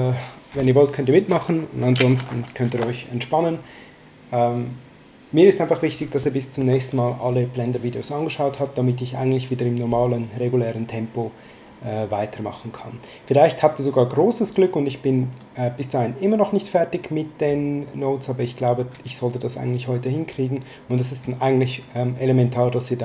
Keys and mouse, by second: 13.8 click, 15.3 click, 20.0 click.